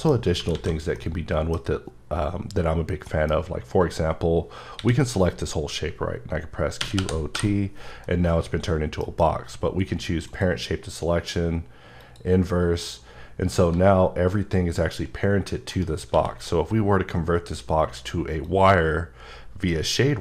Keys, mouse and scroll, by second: 0.5 a, 1.0 middle click, 2.0-3.1 scroll up 3, 3.1 middle click, 3.4 scroll down 1, 4.8 a, 6.8-7.3 typing, 9.0 F9, 10.3 click, 12.0 click, 13.7 g, 15.7 right click, 16.1 q, 18.4 click.